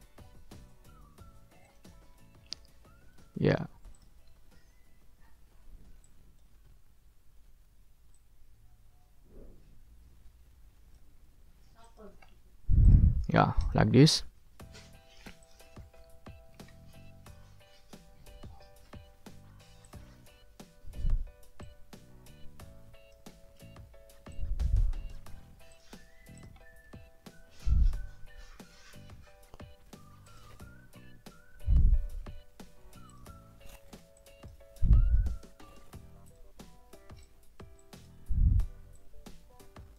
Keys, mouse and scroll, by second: 1.6 ctrl+click, 2.1-2.6 ctrl+scroll down 2, 2.8 ctrl+middle click, 3.9 ctrl+middle click, 4.3 ctrl+scroll up 2, 6.0 click, 8.1-11.1 drag, 11.8 ctrl+click, 12.2-12.6 ctrl+scroll down 2, 12.8 ctrl+middle click, 13.2 ctrl+middle click, 13.8 ctrl+middle click, 15.4 middle click, 16.6-17.1 ctrl+scroll up 2, 17.4 ctrl+scroll down 2, 18.4 ctrl+scroll up 2, 19.8 click, 21.6-23.7 drag, 24.3-25.3 drag, 25.7 click, 26.3 click, 26.8-27.5 scroll up 1, 30.2 click, 30.7-31.5 ctrl+scroll down 4, 31.9 ctrl+middle click, 32.6 ctrl+scroll up 2, 33.1 ctrl+click, 33.5 ctrl+scroll up 2, 34.1 click, 36.3 click, 37.2-38.2 drag, 38.9-39.9 drag.